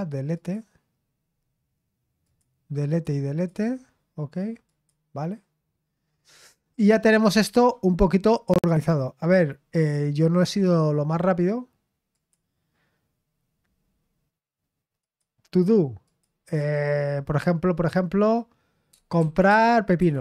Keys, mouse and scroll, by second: 0.3 click, 2.2 click, 2.9-3.7 drag, 4.7 click, 5.2 click, 7.4-10.6 scroll down 5, 10.6-12.1 scroll down 1, 12.1 click, 15.0 click, 16.1 click, 19.1-20.2 typing.